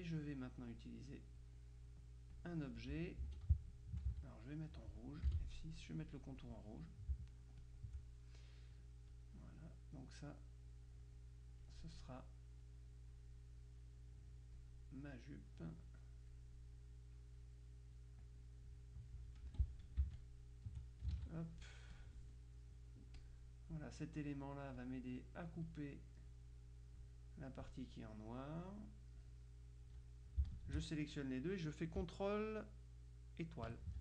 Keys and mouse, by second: 1.5-3.3 drag, 3.3 F2, 4.2 ctrl+z, 5.3 F6, 5.9-7.0 drag, 7.7 shift+click, 9.2-12.2 drag, 12.7-13.7 drag, 15.3-16.9 drag, 18.0-19.7 drag, 19.5 F2, 20.2 shift+click, 21.2 ctrl+a, 22.0 click, 23.2 click, 24.8-26.7 drag, 28.4 click, 30.6-31.7 shift+drag, 33.7 ctrl+KP_Multiply.